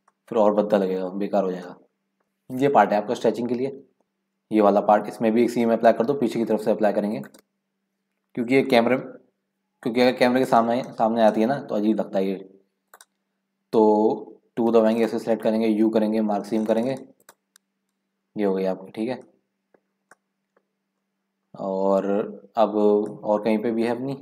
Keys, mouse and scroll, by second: 0.3 shift+middle click, 0.9 scroll down 1, 1.2-2.2 shift+middle drag, 2.2 click, 3.7 KP_Decimal, 4.0 middle click, 4.7-5.9 scroll up 4, 5.9-7.2 middle drag, 7.2 click, 12.9-14.8 drag, 14.8 2, 15.0 click, 15.9 u, 18.3-18.6 scroll down 1, 18.6 scroll up 2, 18.8-19.7 scroll down 1, 19.9 scroll down 10, 20.1 middle click, 20.9-22.2 scroll up 5, 22.9 scroll down 5, 23.6 scroll up 7, 23.9 middle click.